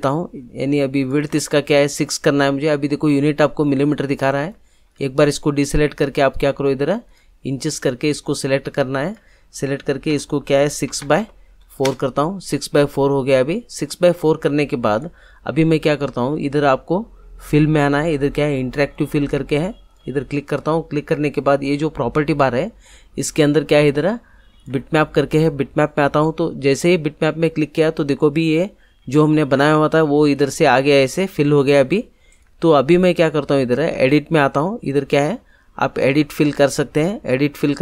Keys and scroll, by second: 10.1 6, 10.8 Tab, 11.2 4, 11.8 Return.